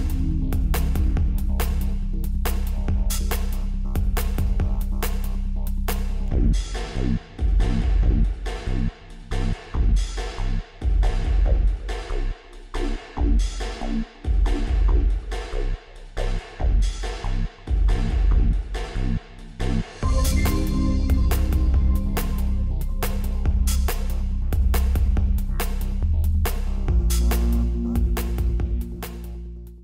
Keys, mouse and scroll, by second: 1.1-2.8 middle drag, 3.3 g, 11.9-13.7 drag, 13.9 KP_1, 15.7 r, 18.2-20.1 drag, 19.6 KP_5, 20.1-22.0 middle drag, 23.8 middle click, 24.2 scroll up 1, 24.8-26.4 middle drag, 26.5 middle click.